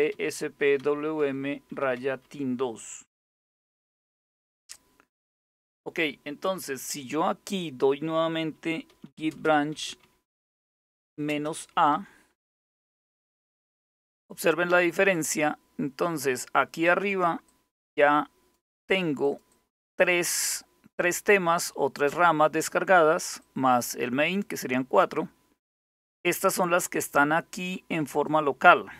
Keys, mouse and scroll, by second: 0.0-2.8 typing, 3.5 Return, 8.3-12.1 typing, 12.2 Return, 17.1 click, 18.9-21.4 drag, 23.0 click, 24.6 click, 25.7-27.9 drag, 28.6-28.9 scroll up 2.